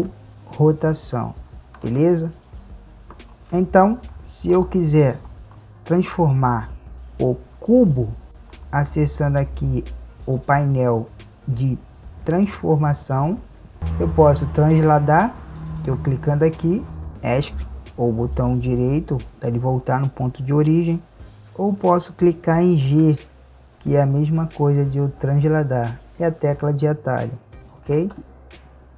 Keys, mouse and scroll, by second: 0.1 r, 4.8-7.9 right drag, 8.3 click, 11.9-13.8 drag, 15.7-17.1 drag, 22.9 g.